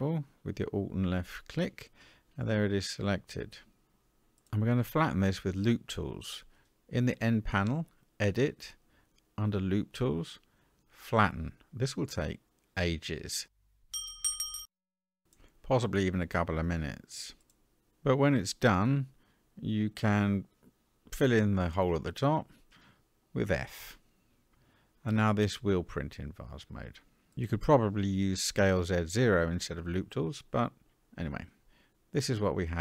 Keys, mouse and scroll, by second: 1.1 alt+click, 2.1-2.5 scroll down 3, 5.2 n, 7.2 click, 9.1 click, 11.0-16.8 drag, 20.3 middle click, 22.3 f, 23.2 Tab, 23.8-24.5 scroll down 4, 24.5-25.7 middle drag, 27.6 click, 28.6-30.5 middle drag, 31.3-32.4 drag, 32.6-32.8 middle drag.